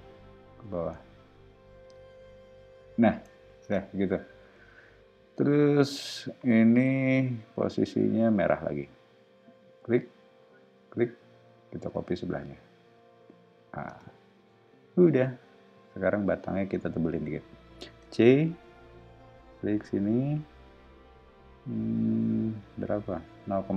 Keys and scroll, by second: 3.6 space, 4.6 q, 6.2 Right, 6.6 Left, 7.0 Up, 7.8 Right, 13.9 space, 17.8 c.